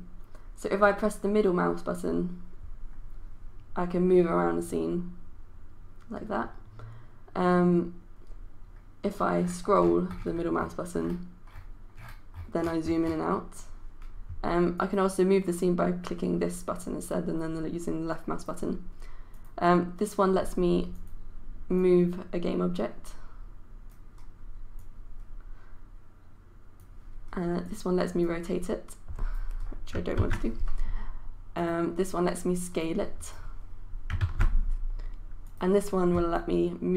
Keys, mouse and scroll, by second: 0.8-6.6 middle drag, 9.2 scroll down 1, 10.5-11.9 scroll up 1, 11.9 scroll down 1, 12.3 scroll up 1, 12.6 scroll down 1, 12.8 scroll up 1, 13.0-13.6 scroll down 1, 14.7-29.6 drag, 30.2 ctrl+z, 31.5-32.6 drag, 34.2 ctrl+z, 35.4-36.9 drag.